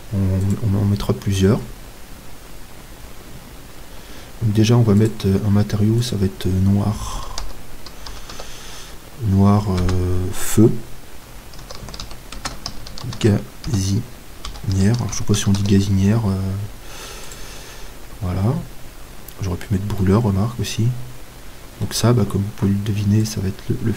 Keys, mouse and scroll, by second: 6.1-20.9 drag, 20.9 middle click, 23.3-23.9 drag.